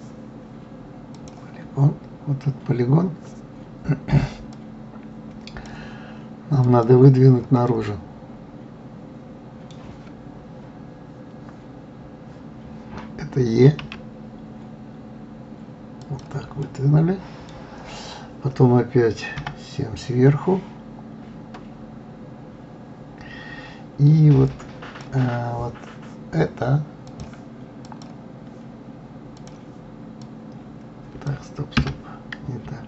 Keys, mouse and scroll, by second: 1.5 click, 4.9-7.2 drag, 8.1-11.1 middle drag, 14.2 e, 17.0-19.7 middle drag, 19.7 KP_7, 24.9 click, 27.5 click, 29.8 click, 30.6 click, 32.2 Escape.